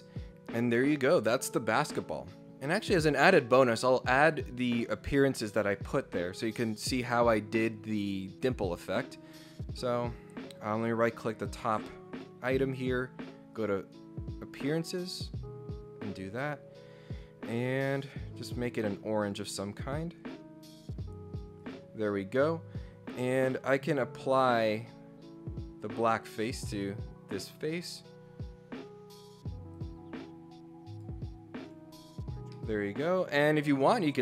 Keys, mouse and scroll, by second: 9.8 right click, 12.1 click, 13.5 click, 17.7 click, 18.7 click, 19.2 click, 20.7 click, 21.6 click, 24.2 click, 25.9 click, 26.6 click, 29.7 click, 30.9 click, 31.7 click, 31.9 scroll up 2, 32.3 scroll down 1, 32.5-33.6 middle drag, 33.0 scroll down 1.